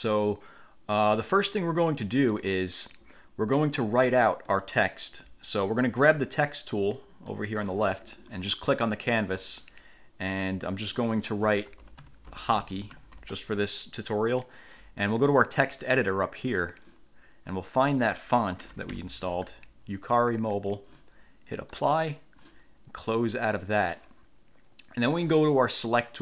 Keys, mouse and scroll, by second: 2.5 click, 4.0 1, 4.7 click, 7.5 click, 9.1 click, 11.8-13.8 typing, 16.6 click, 17.9 click, 18.6-19.6 typing, 20.7 click, 21.9 click, 23.5 click.